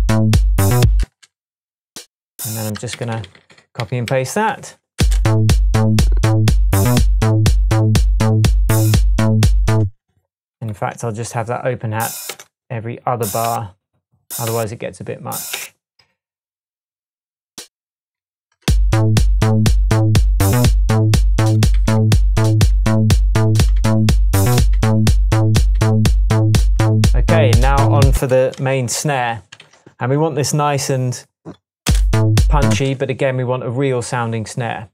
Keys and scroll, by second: 1.0 space, 3.0 super+d, 4.5 shift+super+d, 4.7 shift+super+Tab, 5.0 space, 9.8 space, 12.3 BackSpace, 15.5 BackSpace, 18.2 super+d, 18.7 space, 21.8 super+d, 22.7 super+d, 23.8 super+d, 24.7 super+d, 25.8 super+d, 27.9 d, 28.2 space, 28.6 Tab, 29.5 Tab, 29.6 s, 29.7 s, 31.9 space.